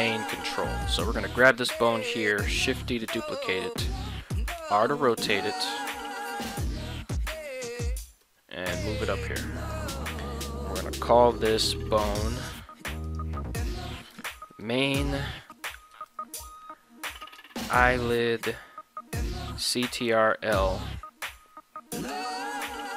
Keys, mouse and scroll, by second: 0.0 right click, 2.6 shift+d, 4.0 click, 4.6 r, 7.7 click, 8.2 g, 9.6 click, 10.2 middle click, 12.2 click, 13.0-22.9 drag.